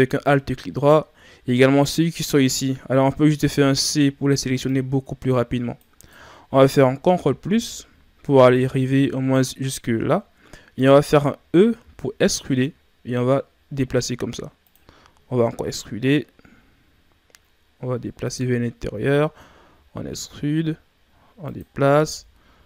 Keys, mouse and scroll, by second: 0.7-3.4 scroll up 1, 3.4 c, 7.1 ctrl+KP_Add.